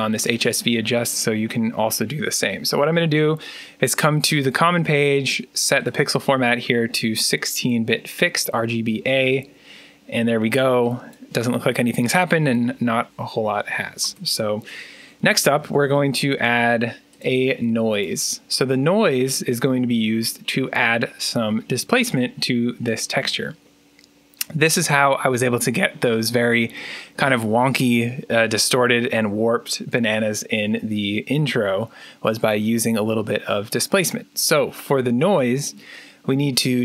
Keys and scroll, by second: 13.9 Tab, 14.9-16.2 typing.